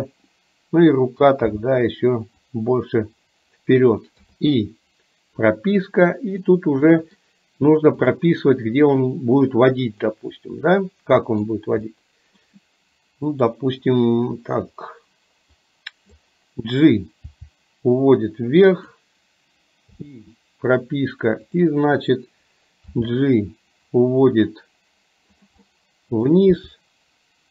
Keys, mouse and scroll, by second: 1.7 g, 4.3 i, 6.6 middle click, 8.2 click, 10.2-11.6 middle drag, 11.9-12.6 middle drag, 15.7 click, 17.3 g, 20.1 i, 21.7 click, 22.9 g, 25.8-26.3 middle drag, 26.6 g.